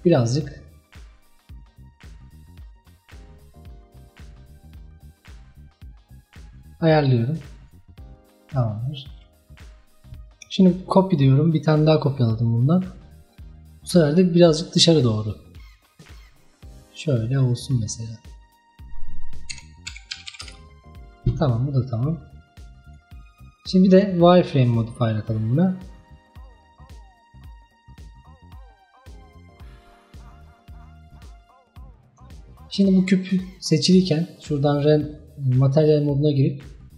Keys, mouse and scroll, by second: 8.1-10.7 scroll down 1, 10.8-13.8 drag, 14.0-17.0 drag, 18.8-21.1 drag, 21.1 scroll down 1, 21.9-26.9 drag, 28.2 scroll up 2, 29.2-30.8 middle drag, 30.8 scroll down 2, 31.2-31.6 middle drag, 31.6-32.0 scroll up 3, 34.8-36.9 drag.